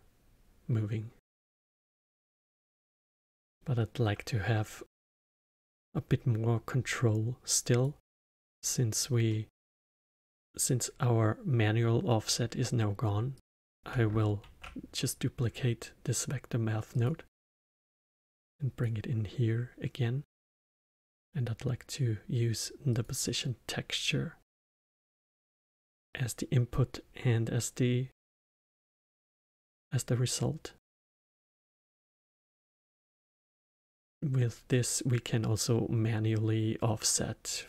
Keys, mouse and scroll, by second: 2.9 space, 3.0-6.8 middle drag, 6.8-9.2 drag, 9.2-12.3 middle drag, 13.3 click, 14.3 shift+d, 17.9-23.4 drag, 32.0-37.6 drag.